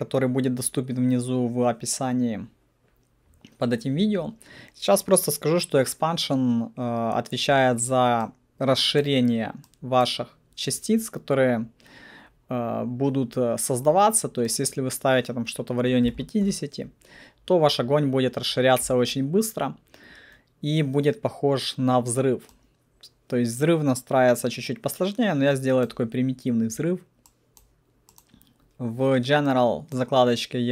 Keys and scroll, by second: 15.8-16.9 typing.